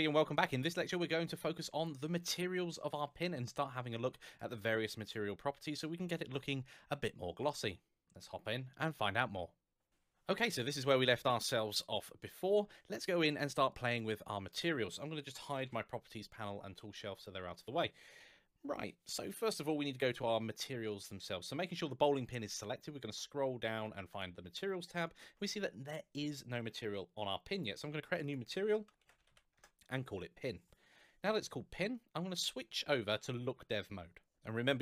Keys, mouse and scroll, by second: 4.1 middle click, 12.9-13.4 scroll up 1, 13.4 scroll down 1, 13.8 middle click, 15.2 n, 15.4 t, 20.8 scroll down 1, 23.1-23.8 scroll down 1, 23.9 click, 27.3 click, 28.8 shift+p, 29.1 n, 29.1 i, 29.3 Return, 31.8-32.5 scroll up 1, 32.6 middle click, 34.6 z.